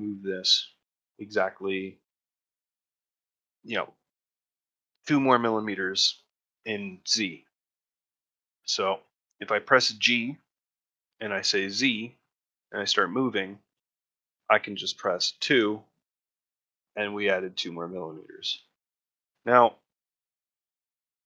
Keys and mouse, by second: 4.3 ctrl+middle click, 4.7 shift+middle click, 8.5 shift+middle click, 9.0 ctrl+middle click, 9.7 shift+middle click, 17.5 ctrl+middle click, 17.8 shift+middle click, 18.5 ctrl+middle click, 18.8 shift+middle click, 19.2-21.2 middle drag.